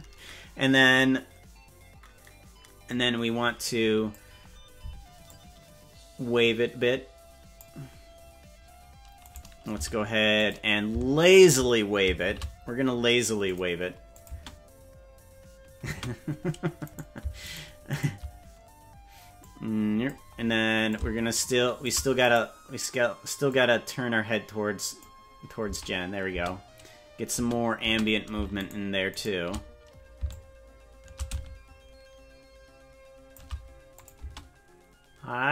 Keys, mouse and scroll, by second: 2.9-4.2 drag, 5.3-7.6 drag, 9.4 right click, 9.8 g, 11.4 shift+right click, 12.4 shift+d, 14.1 click, 14.3 space, 15.9 space, 17.1 right click, 17.7 shift+right click, 18.1 right click, 19.4 click, 20.9-21.9 shift+drag, 22.3 right click, 23.5-25.0 drag, 25.7 space, 26.5 space, 27.5 space, 27.9 space, 28.7 shift+right click, 29.3 shift+right click, 30.3-33.4 shift+drag, 34.1 click, 34.3 space.